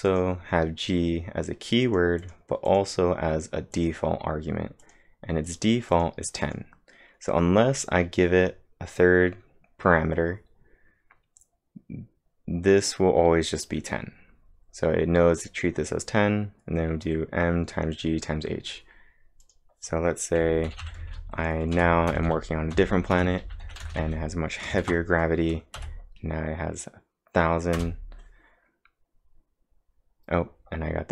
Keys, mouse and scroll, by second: 0.1 click, 1.8 click, 2.2 click, 19.4 click, 20.4-24.4 typing, 24.8 ctrl+`, 25.8 Up, 27.8 Return, 29.5-31.1 typing.